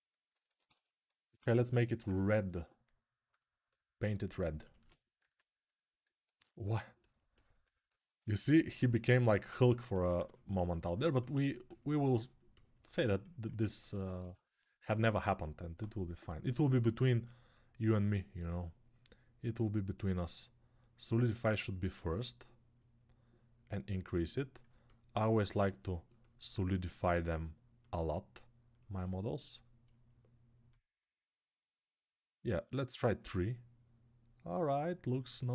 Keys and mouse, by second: 1.6-8.1 alt+right drag, 4.6 alt+q, 4.9 s, 6.1 alt+q, 8.1-12.7 alt+drag, 12.7-14.6 ctrl+alt+right drag, 14.6-22.6 drag, 22.6 middle click, 23.3-35.5 drag.